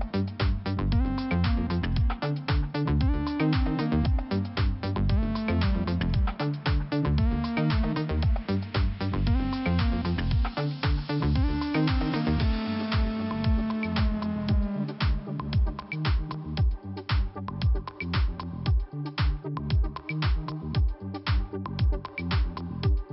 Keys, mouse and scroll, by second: 1.1 click, 3.3 scroll up 2, 4.4 click, 5.5 scroll up 1, 6.0 click, 7.2 click, 8.6-9.4 scroll down 1, 9.7 click, 13.6 click, 15.4 click, 17.3-17.8 scroll up 2, 18.4 click, 19.3 middle click, 21.0 click, 21.9 middle click.